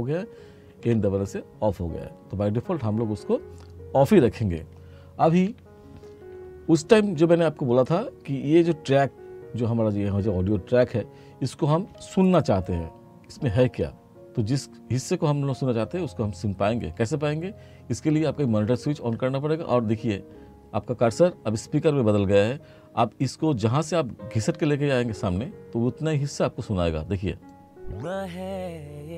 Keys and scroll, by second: 0.9 n.